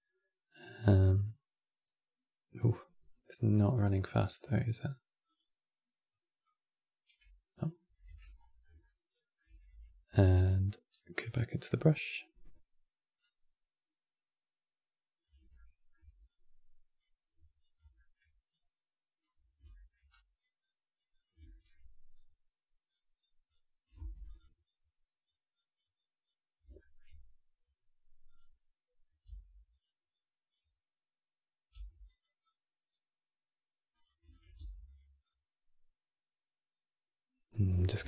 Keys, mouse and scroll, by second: 3.1-5.3 drag, 6.2-7.8 drag, 7.8 n, 8.1-8.5 scroll up 4, 8.5 shift+middle click, 9.4 n, 10.9-15.2 drag, 15.2 shift+middle click, 16.0-17.7 drag, 17.7 shift+middle click, 18.2-19.3 drag, 19.3 scroll down 1, 19.4 shift+middle click, 19.8-21.2 drag, 21.2 shift+middle click, 21.9-23.7 drag, 23.7 f, 24.3-26.5 drag, 26.5-28.0 shift+middle drag, 28.0 click, 28.9 f, 29.8-31.4 drag, 31.4 f, 32.1-34.1 drag, 34.3 f, 34.9-37.6 drag, 37.6 scroll down 2, 37.8 shift+middle click.